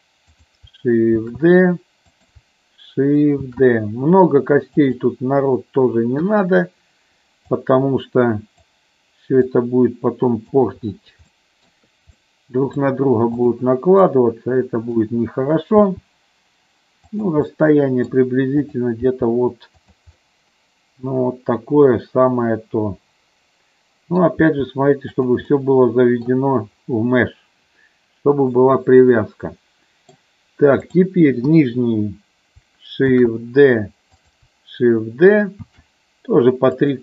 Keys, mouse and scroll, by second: 0.3 click, 1.2 shift+d, 2.1 click, 4.8 click, 6.1 KP_3, 7.4-8.7 drag, 9.4-10.5 drag, 11.3 shift+middle click, 12.1 middle click, 13.3 click, 14.0 middle click, 15.6 g, 17.2 click, 17.5 middle click, 18.7 click, 18.9 g, 19.8 click, 20.1-24.2 middle drag, 24.4 g, 25.1 click, 25.5 middle click, 28.4-30.1 middle drag, 30.8 click, 31.4 KP_1, 33.0 shift+d, 34.1 click, 35.5 shift+d, 36.7 click.